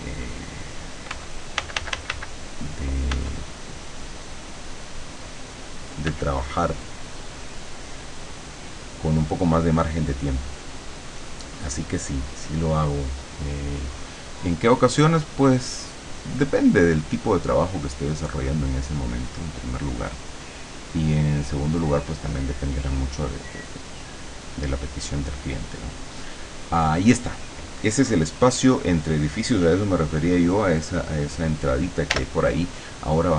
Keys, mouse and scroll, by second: 1.2 ., 1.7 ,, 3.2 ., 6.1 ,, 6.5-7.5 middle drag, 7.5-10.3 drag, 10.3-12.4 middle drag, 19.3 click, 24.3 click, 32.1 l.